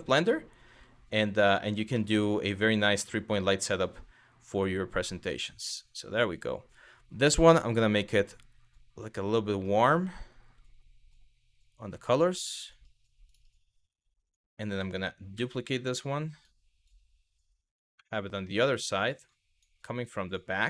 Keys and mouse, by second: 0.3 g, 1.3 click, 1.7 middle drag, 2.6 click, 7.1 click, 12.9 click, 13.9 click, 15.0 shift+d, 16.5 click, 17.7-18.1 middle drag, 18.9-19.3 drag, 19.9 click, 20.4 g.